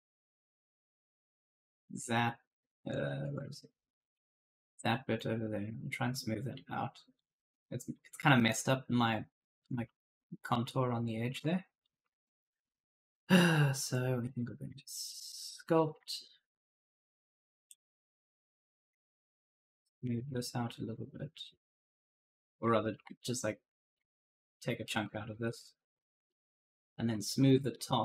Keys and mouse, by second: 1.2 click, 2.7 click, 5.0 click, 8.1 right click, 9.5 right click, 9.6-12.3 typing, 14.1 click, 15.0 shift+click, 17.6 click, 18.9 shift+click, 20.1 shift+click, 22.7-23.4 typing, 22.7 right click, 24.7 right click, 24.8 d, 25.6 shift+click, 26.0-27.0 typing, 26.1 right click, 27.2 right click.